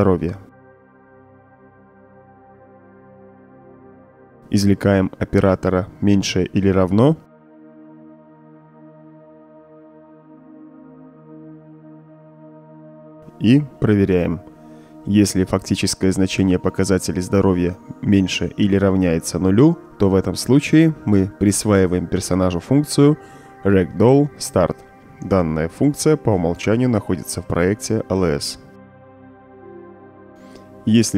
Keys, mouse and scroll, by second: 0.4-2.3 drag, 3.0-3.6 drag, 5.0-7.0 drag, 8.1 shift+,, 9.2 =, 10.2 Return, 11.5-12.0 drag, 12.6-13.1 drag, 13.4-14.5 right drag, 15.2 alt+click, 15.9-16.8 right drag, 17.6 right click, 19.9-20.6 right drag, 20.8-21.7 drag, 22.2-23.1 typing, 25.8 click, 26.8-27.4 drag, 28.7-29.6 drag, 30.3-30.9 drag, 30.3-30.9 right drag.